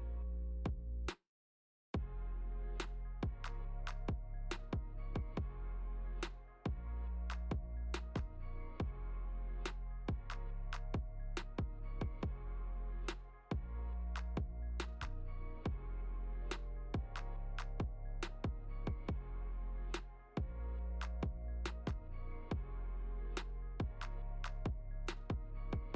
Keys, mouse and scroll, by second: 3.3 g, 7.3 g, 11.5 Tab, 12.1 click, 13.0 g, 16.0 middle click, 16.5-16.9 scroll down 7, 17.1 middle click, 17.8 click, 18.1 scroll down 1, 18.4 middle click, 19.3-19.7 scroll down 2, 19.7 middle click, 20.6 ctrl+s, 21.5 shift+middle click, 21.9 middle click, 22.3 scroll up 3, 22.6 shift+middle click, 22.9 scroll up 4, 23.2 shift+middle click, 23.6-24.2 scroll down 3, 24.5 click, 25.1 g.